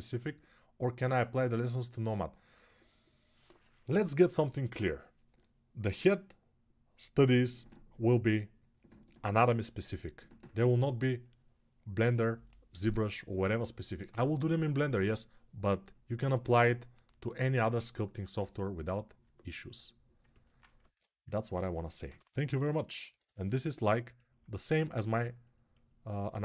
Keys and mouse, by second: 21.8 g, 22.2 ], 22.4 ], 24.9-26.4 drag.